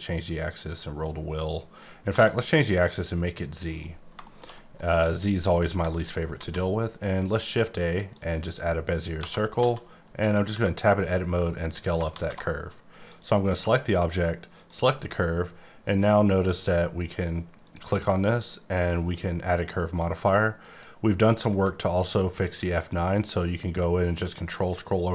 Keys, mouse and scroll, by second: 0.2-1.6 scroll up 4, 1.6-2.1 scroll up 1, 2.1 x, 3.7 click, 3.9 scroll down 2, 4.2 middle click, 4.5 double middle click, 5.9 shift+middle click, 6.3 shift+a, 8.1 click, 9.2 Tab, 9.5 s, 10.3 click, 10.5 Tab, 12.1 alt+z, 13.0 click, 17.6 click, 20.6 F9, 21.9-22.5 ctrl+scroll down 1, 22.5-24.6 ctrl+scroll down 8, 24.6-25.1 ctrl+scroll up 7.